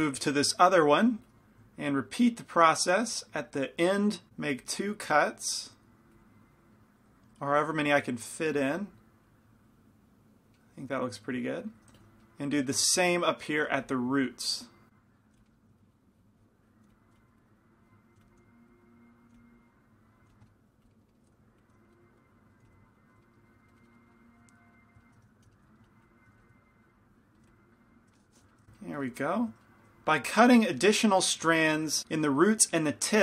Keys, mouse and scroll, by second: 1.4 f, 2.2-4.3 drag, 2.2-4.3 middle drag, 4.3 ctrl+z, 4.8-8.2 drag, 8.2 middle click, 8.6 f, 9.4-11.3 drag, 12.1 f, 12.8 f, 13.9 f, 14.4-17.4 drag, 14.4 middle click, 15.4 f, 15.5 middle click, 16.9 f, 17.2 f, 17.5-18.6 drag, 18.2-22.7 typing, 18.9-21.2 drag, 20.5 middle click, 21.2 scroll down 1, 22.0-23.3 scroll down 1, 23.3-24.6 drag, 23.4 middle click, 24.6 middle click, 25.3-27.5 typing, 25.5-28.5 drag, 28.5-32.0 middle drag, 32.2-33.2 middle drag.